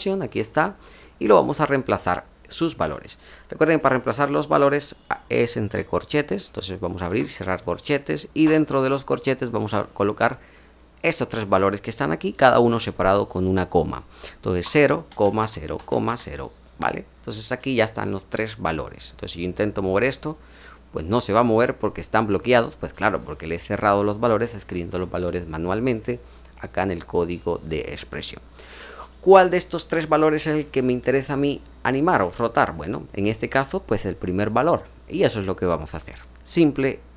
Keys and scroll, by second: 8.4 BackSpace, 16.0 typing.